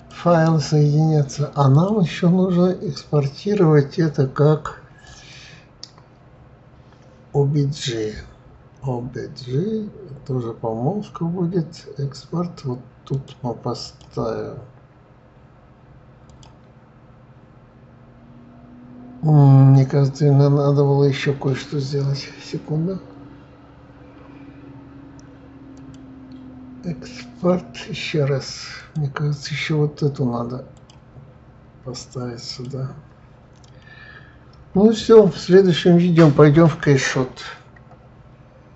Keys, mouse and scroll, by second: 0.0 click, 1.7-4.7 drag, 25.7-28.7 drag.